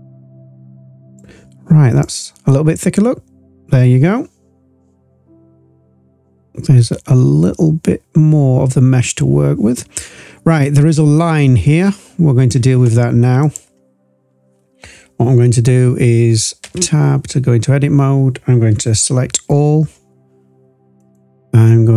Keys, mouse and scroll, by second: 2.0-12.4 drag, 13.3 click, 17.0 Tab, 19.1 a, 20.9-21.9 drag.